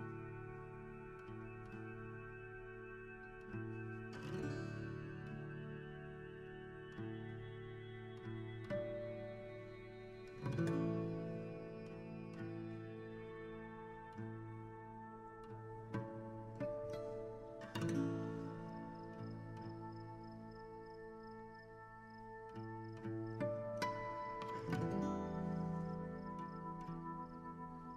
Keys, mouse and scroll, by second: 3.7 a, 3.8 right click, 4.7 scroll down 1, 4.8-6.0 middle drag, 9.9 click, 10.5 KP_7, 11.9 right click, 12.1 r, 12.9 g, 13.4 r, 13.8 g, 15.3 g, 16.7 right click, 17.0-19.1 typing, 21.2 r, 25.4 a, 26.8-27.9 right drag.